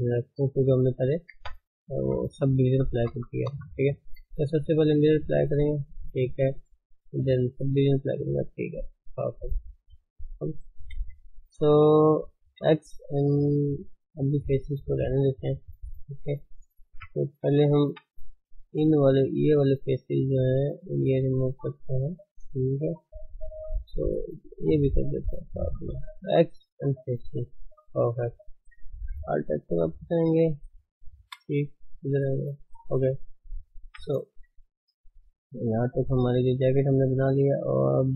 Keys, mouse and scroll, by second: 1.4 Tab, 2.0 ctrl+z, 2.2 ctrl+z, 2.5 ctrl+z, 2.7 ctrl+z, 3.1 ctrl+z, 3.5 ctrl+z, 5.2 click, 5.4-5.8 scroll down 4, 5.8 Tab, 6.2 Tab, 7.5 click, 7.7 Tab, 7.9 middle click, 8.2 scroll up 2, 8.5-10.9 shift+middle drag, 10.9 KP_1, 14.4 click, 16.9 1, 17.8 3, 18.7 click, 20.5 ctrl+click, 21.1 ctrl+click, 21.8 ctrl+click, 22.0-23.2 middle drag, 23.2-23.7 scroll up 1, 23.7 shift+click, 24.1 shift+click, 24.4 shift+click, 24.6 shift+click, 24.9-26.8 middle drag, 26.8 x, 27.0 middle click, 27.9 Tab, 28.2-28.9 middle drag, 29.4-31.2 middle drag, 31.2 KP_1, 31.7 click, 32.5 click, 32.7 Tab, 33.4 click, 33.8 Tab, 34.4 shift+middle click, 34.9 scroll down 2, 35.2 shift+middle click, 35.4-35.7 scroll up 2, 35.7 shift+middle click, 36.6-37.0 scroll down 1, 37.0-38.1 middle drag.